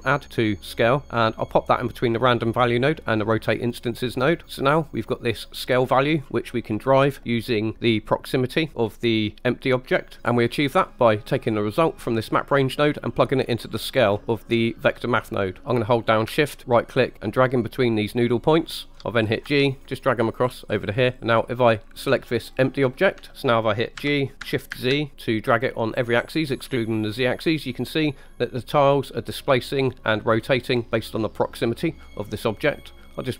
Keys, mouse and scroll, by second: 1.0-3.6 drag, 4.8-6.0 drag, 6.9 middle click, 10.2 right click, 10.2 middle click, 11.8 click, 12.0-14.2 drag, 16.6 shift+right click, 19.5 g, 22.4 click, 24.0 g, 24.7 shift+z.